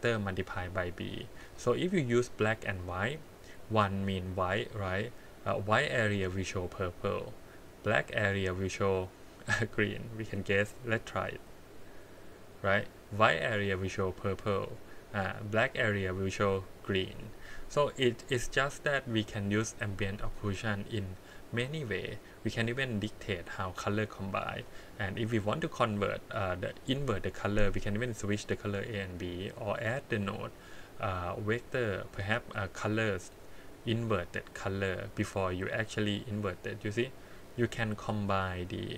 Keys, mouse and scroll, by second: 2.5 click, 9.9-10.9 drag, 18.1-18.7 scroll down 2, 19.2-20.6 drag, 21.3-22.8 drag, 24.0 click, 29.6-34.6 drag, 37.2 scroll down 2.